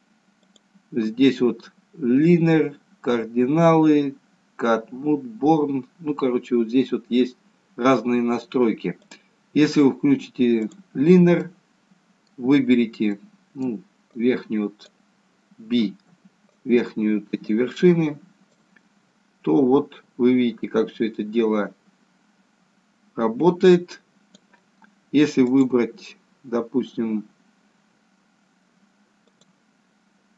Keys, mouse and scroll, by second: 0.5 click, 9.0 click, 11.4 middle click, 13.2 middle click, 14.2 click, 16.0 b, 19.1 click, 25.5 click, 29.3 click.